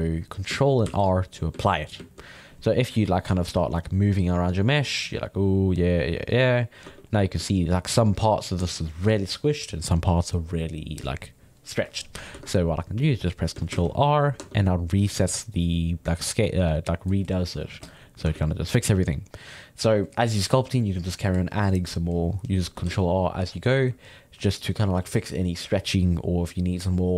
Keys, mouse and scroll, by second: 0.9 ctrl+r, 1.2-3.3 middle drag, 3.3 f, 3.8-6.8 drag, 6.8 Tab, 7.0-11.8 middle drag, 12.3 Tab, 13.1 middle click, 13.9 ctrl+r, 14.0 middle click, 14.4 Tab, 15.0-17.8 middle drag, 17.8 click, 18.0 middle click, 18.2 Tab, 18.6-22.6 middle drag, 22.9 ctrl+r, 24.2-27.1 middle drag.